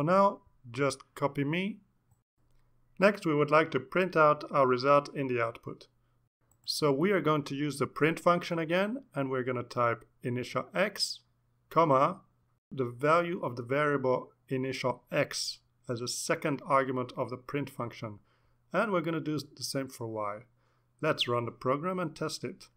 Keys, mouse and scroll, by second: 4.1 Return, 4.5-7.8 typing, 11.1-16.6 typing, 17.1 shift+Up, 17.5 ctrl+c, 17.6 ctrl+v, 17.8 ctrl+v, 18.0 ctrl+Left, 19.1 shift+Right, 19.2 shift+y, 19.6 Right, 20.5 shift+Left, 20.6 shift+y, 21.3 ctrl+s, 22.4 click.